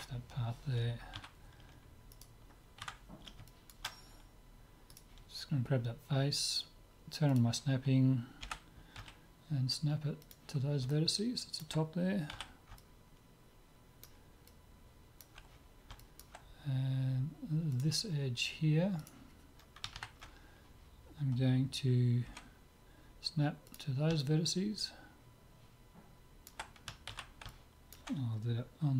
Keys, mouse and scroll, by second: 1.2 q, 2.2-4.0 right drag, 2.8 Tab, 3.5 click, 4.0 middle click, 4.9 click, 4.9-6.8 right drag, 7.3-9.0 drag, 8.4 g, 10.9-12.3 middle drag, 12.3 z, 13.0-14.3 middle drag, 14.5-17.7 middle drag, 17.7-19.5 drag, 19.0-20.8 right drag, 22.3 g, 24.2-26.2 middle drag, 27.1 ctrl+z, 27.5-28.9 middle drag.